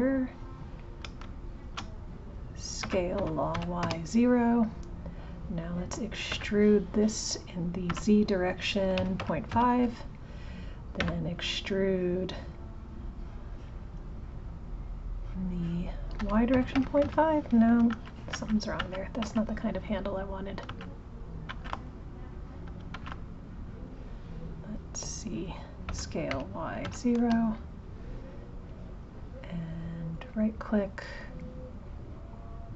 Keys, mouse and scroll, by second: 0.8 click, 1.6 shift+click, 2.8 s, 5.1 click, 17.9 ctrl+z, 18.3 ctrl+z, 23.8 click, 28.7 click.